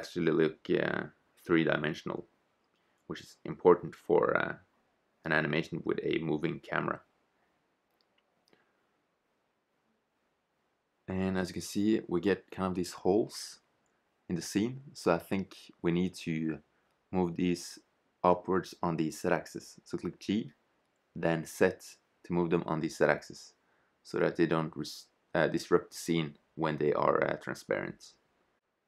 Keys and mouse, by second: 0.4 click, 0.8-1.8 drag, 2.8-4.0 middle drag, 4.0 shift+z, 4.7-5.9 middle drag, 8.2 KP_0, 13.8 shift+z, 14.5 middle click, 16.7 right click, 16.9 click, 17.8-20.3 right drag, 20.3 KP_0, 20.5 middle click, 21.3 shift+z, 22.9 g, 27.3 click.